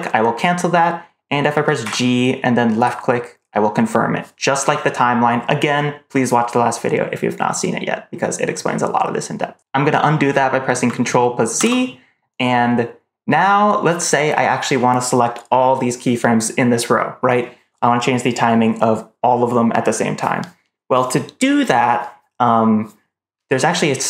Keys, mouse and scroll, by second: 1.7 g, 11.5 ctrl+z.